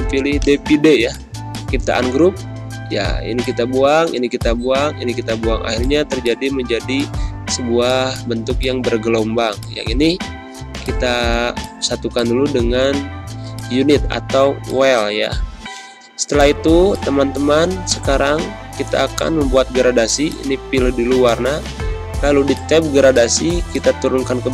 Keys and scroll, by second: 2.8 Delete, 5.9 z, 6.7 space, 8.8 space, 12.4 ctrl+-, 13.3 space, 14.4 space.